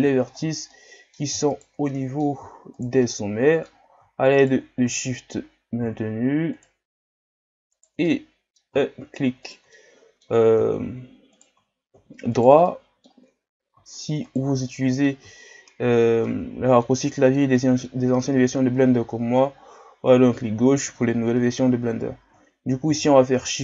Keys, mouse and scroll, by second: 0.3-0.7 ctrl+scroll up 7, 0.7 middle click, 1.5 shift+right click, 1.9 middle click, 2.8 shift+right click, 3.1-4.3 middle drag, 4.3 shift+right click, 4.7 scroll down 3, 5.0 middle click, 5.4 scroll up 1, 6.5 shift+right click, 7.8 shift+right click, 8.1-9.4 middle drag, 9.4 shift+right click, 9.7-11.4 middle drag, 11.4-12.4 shift+right drag, 12.6 middle click, 13.5-14.3 scroll up 1, 14.3 shift+right click, 14.7-17.1 middle drag, 17.1 scroll down 4, 17.5 middle click, 18.1-18.7 scroll up 3, 19.2 scroll up 2, 20.9 scroll down 1, 22.9 shift+d.